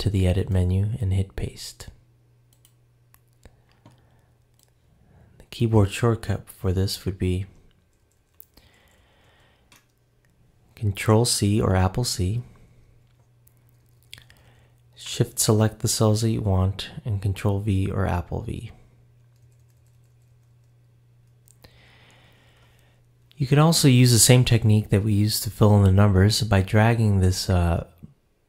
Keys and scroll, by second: 7.4 Return, 7.8 Up, 12.1 super+c, 12.6 Down, 13.4 shift+Down, 18.3 super+v, 19.2 Up, 20.9 Right, 21.3 Up.